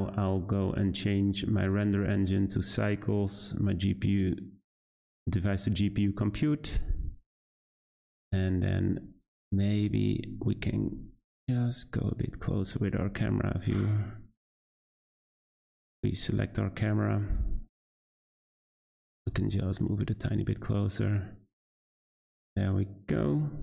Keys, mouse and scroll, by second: 0.5 click, 1.6-7.5 drag, 7.5-8.3 scroll down 1, 9.2 click, 10.4 g, 13.2 `, 15.7 click, 16.0 scroll up 1, 16.1-17.2 scroll down 7, 16.2 middle drag, 17.2-17.9 middle drag, 17.9 `, 19.0 g, 22.2-23.6 drag.